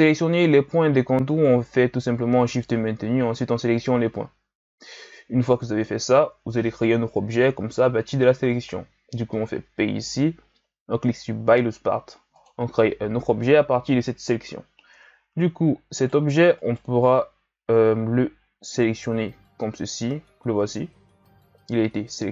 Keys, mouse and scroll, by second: 9.6 p, 14.9 Tab, 15.9 right click, 16.6 right click, 18.6 g.